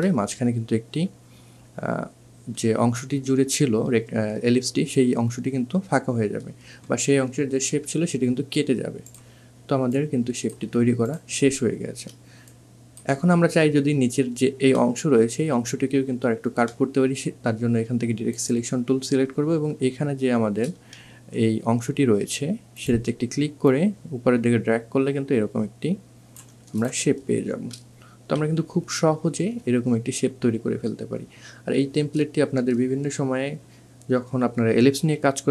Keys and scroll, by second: 20.3 2.